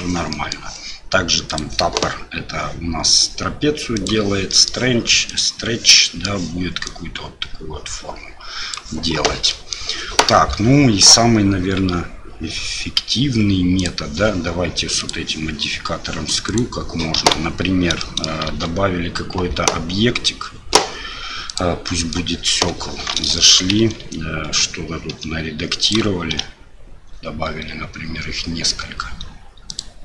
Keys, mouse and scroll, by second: 0.3 middle drag, 1.5 click, 3.9 click, 4.5 middle drag, 5.3 click, 6.0 middle drag, 6.9-8.8 drag, 9.5 middle click, 13.8 click, 15.1-16.1 drag, 16.5 click, 17.2 Delete, 18.0 middle drag, 18.5 shift+a, 21.9 middle click, 22.5 KP_7, 23.4 shift+middle drag, 23.8 Tab, 25.1 s, 26.3 shift+d.